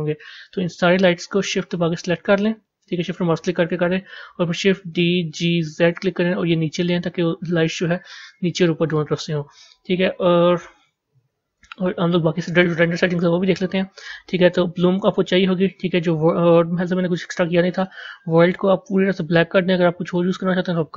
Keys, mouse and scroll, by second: 1.3 shift+drag, 2.4 shift+click, 4.8 shift+d, 8.8-10.4 middle drag, 10.4-11.4 scroll down 1, 11.4 a, 13.6 click, 14.9 click, 17.6 click, 18.7 click.